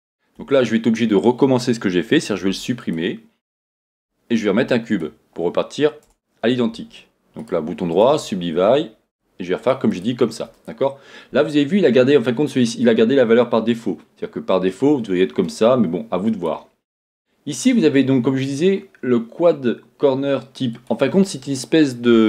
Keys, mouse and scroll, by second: 2.5 x, 3.9 shift+a, 6.0 Tab, 7.4-9.6 right drag, 9.6 click, 13.7-22.2 drag.